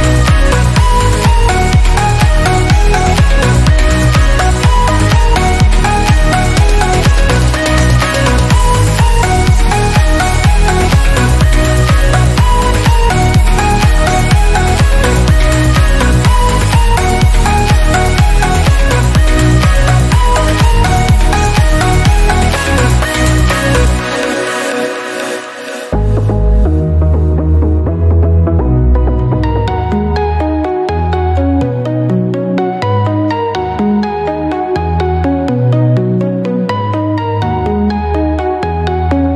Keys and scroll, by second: 5.7 ctrl+alt+d, 10.4 ctrl+alt+d, 16.3 ctrl+alt+d.